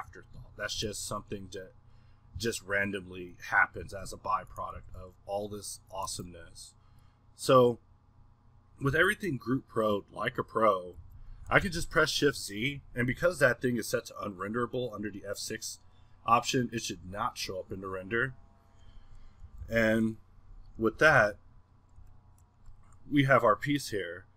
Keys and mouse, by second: 3.4 Escape, 3.8 r, 4.7 g, 6.0 click, 7.0-9.0 middle drag, 9.0 a, 19.7 z, 19.9 z, 20.7 middle click.